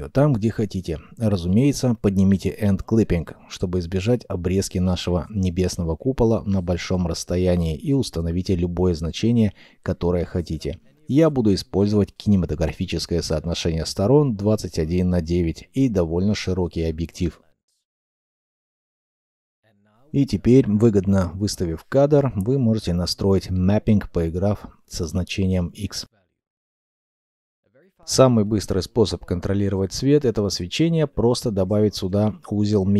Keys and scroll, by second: 1.0 0, 2.1 shift+s, 6.8 0, 6.9 Return, 12.2 2, 12.4 5, 12.5 6, 12.9 Return, 18.6 2, 19.0 Return, 19.0 0, 28.5 shift+a.